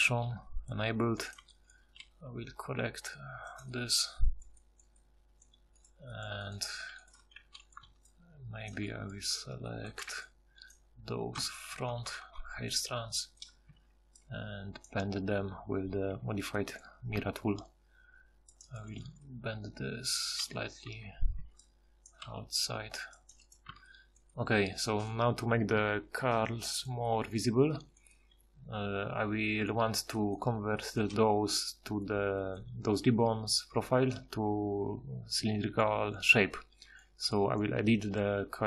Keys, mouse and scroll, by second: 2.0 g, 6.7 g, 7.4 a, 8.7 click, 9.9 a, 11.4-12.2 ctrl+KP_Add, 13.7 ctrl+d, 21.4 ctrl+d, 23.7 Tab.